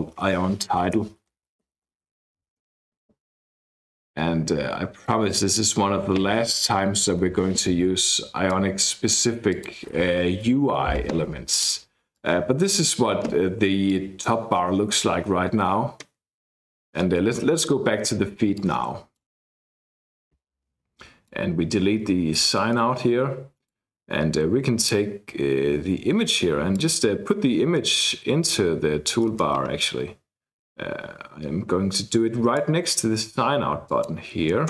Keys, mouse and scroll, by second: 0.7-3.0 typing, 3.8-5.9 drag, 6.7 shift+Left, 7.1 shift+Left, 8.4 click, 9.5 click, 10.3 BackSpace, 11.5 click, 12.1-13.2 drag, 13.9 click, 18.5 click, 19.4 click, 20.0-21.6 drag, 22.4 BackSpace, 23.7-25.2 drag, 26.0-26.7 scroll up 1, 26.7-32.9 drag, 27.0-27.8 scroll up 1, 33.8 click.